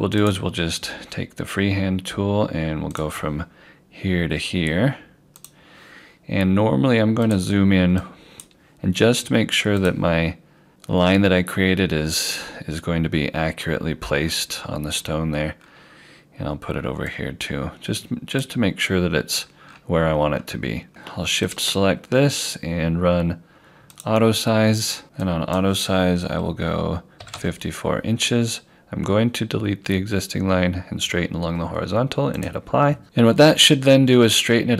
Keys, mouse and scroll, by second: 0.3 click, 12.0-12.7 scroll down 1, 15.1-16.5 scroll up 1, 17.1 click, 19.4 scroll down 1, 20.9 click, 21.5 shift+click, 27.2 5, 32.4 click, 33.0-33.8 scroll down 1.